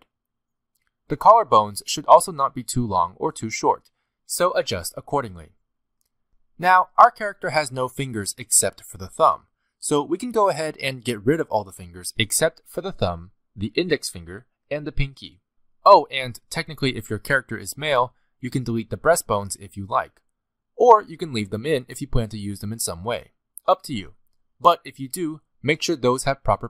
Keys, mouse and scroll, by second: 0.0-0.8 typing, 0.5 shift+middle click, 0.6 scroll down 2, 1.0 middle click, 1.7-2.5 scroll up 4, 1.7 click, 1.9 shift+middle click, 2.3 click, 2.5 shift+middle click, 2.6 g, 3.0 g, 3.5 g, 3.7 middle click, 4.3 click, 4.4 middle click, 4.7 click, 4.9 g, 5.4 g, 5.7 scroll down 1, 5.8 g, 6.5 click, 6.7 shift+middle click, 6.8 middle click, 6.9 g, 7.1 middle click, 7.4 middle click, 7.4 shift+middle click, 7.5 g, 8.0 ctrl+z, 8.0 middle click, 8.2 middle click, 8.2 alt+a, 8.3 scroll down 2, 8.4 middle click, 8.4 scroll up 1, 8.6-17.8 typing, 9.0 middle click, 9.2 scroll up 1, 9.6 middle click, 9.7 middle click, 10.3 middle click, 11.4 middle click, 12.5 middle click, 12.7 middle click, 13.2 click, 13.3 middle click, 13.7 middle click, 13.8 scroll up 3, 14.1 click, 14.4 middle click, 14.7 click, 14.8 middle click, 15.0 middle click, 15.2 click, 15.3 shift+click, 15.4 middle click, 15.8 middle click, 16.2 middle click, 16.9 middle click, 17.2 middle click, 17.7 click, 17.7 shift+middle click, 18.2 click, 18.4 click, 18.6 scroll up 3, 19.4 middle click, 19.7 g, 20.9 middle click, 21.9 g, 22.7 s, 23.1 g, 23.5 g, 24.2 middle click, 25.5 scroll down 1, 26.0 scroll down 2, 26.1 shift+middle click, 26.5 scroll down 1.